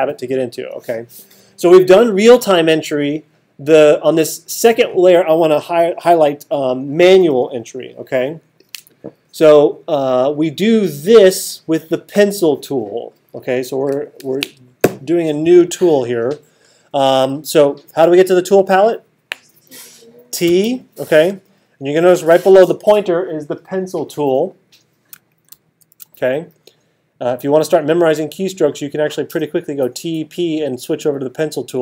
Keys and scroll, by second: 20.5 t, 25.5 alt+super+8.